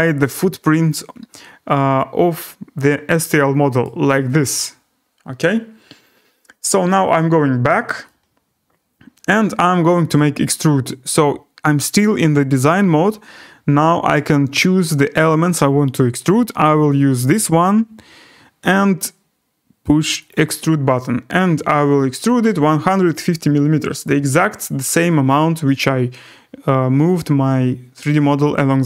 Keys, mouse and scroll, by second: 3.8 right click, 4.2-5.0 scroll, 5.1-5.4 scroll, 7.1 click, 10.1 right click, 17.3 click, 20.3 click, 21.4-23.0 typing, 24.0 Return.